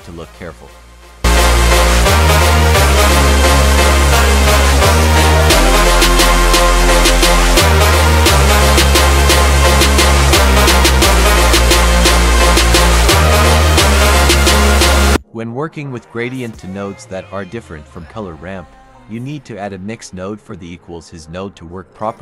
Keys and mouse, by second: 0.1 F3, 3.0 click, 5.3 drag, 8.8 click, 10.9 click, 12.1-12.8 middle drag, 13.1 click, 13.5 F3, 18.5 click, 18.9 click, 19.5 click, 20.7 click.